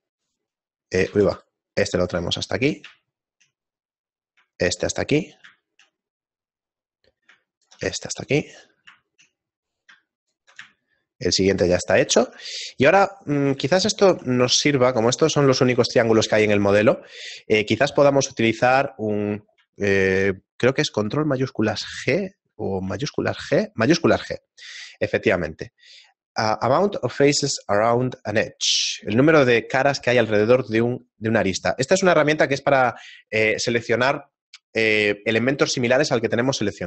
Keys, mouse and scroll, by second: 0.2 right click, 1.1 ctrl+z, 1.4 right click, 3.0 shift+middle click, 4.4 right click, 5.5 scroll down 1, 5.9 shift+middle click, 7.2 right click, 8.0 shift+middle click, 10.2 right click, 11.3 shift+middle click, 12.0 middle click, 12.6 ctrl+Tab, 13.4 right click, 13.8 shift+middle click, 14.8 middle click, 14.8 scroll down 1, 15.5 shift+middle click, 21.8 ctrl+shift+g, 23.1 shift+g.